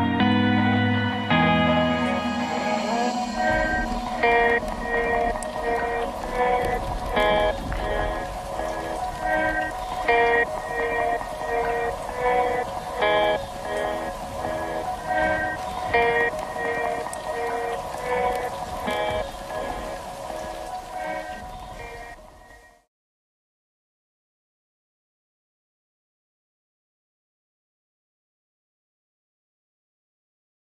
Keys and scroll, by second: 16.7 ctrl+z.